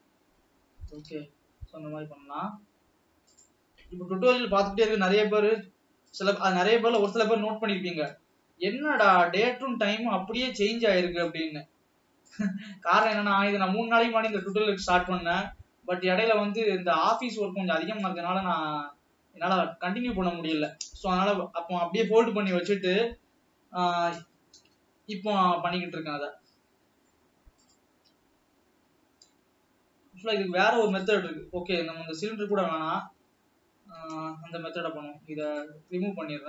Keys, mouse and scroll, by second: 0.1 n, 0.7-1.4 scroll up 1, 1.7 s, 4.7 g, 7.3 s, 10.9 ctrl+s, 11.6 click, 13.5 s, 15.8 ctrl+s, 16.4-17.4 scroll up 2, 17.7-18.6 scroll down 1, 18.6 s, 21.8 ctrl+s, 23.0 r, 26.0 scroll down 2, 26.4-28.8 middle drag, 31.7 middle click, 32.7-33.4 scroll up 2, 33.5-34.7 scroll down 3, 34.7 x.